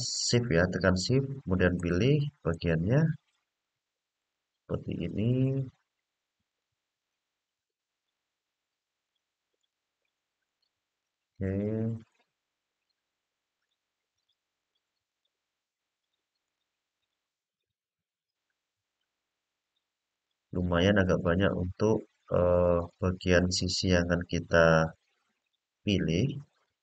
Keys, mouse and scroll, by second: 0.8 shift+click, 1.5 shift+click, 2.2 shift+click, 3.4 shift+click, 3.9 shift+click, 5.2 shift+click, 6.2 shift+click, 6.7 shift+click, 7.3 shift+click, 7.7 shift+click, 8.8 shift+click, 9.3 shift+click, 10.2 shift+click, 10.7 shift+click, 11.8 middle click, 13.3 shift+click, 13.8 shift+click, 14.3 shift+click, 14.8 shift+click, 15.7 shift+click, 16.2 shift+click, 16.7 shift+click, 17.3 shift+click, 17.9 middle click, 19.3 shift+click, 19.8 shift+click, 20.4 shift+click, 21.0 shift+click, 21.9 shift+click, 22.5 shift+click, 23.1 shift+click, 23.7 shift+click, 24.5 shift+click, 25.1 shift+click, 25.7 shift+click, 26.3 shift+click.